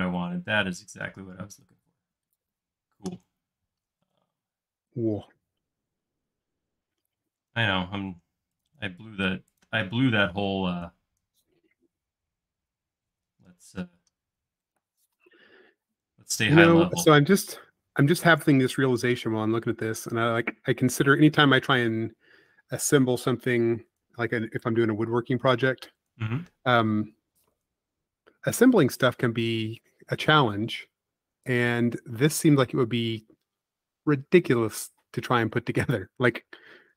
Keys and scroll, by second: 5.4 l, 7.1 space, 9.6 l, 12.0 Up, 18.7 Up, 25.3 Up, 33.5 shift+l.